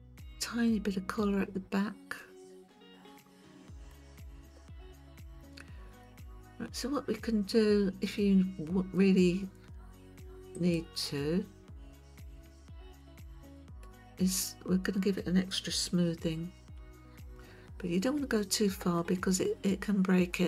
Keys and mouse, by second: 0.4-3.9 middle drag, 10.5 click, 13.0 middle click, 16.8 KP_1, 19.0-20.4 shift+middle drag.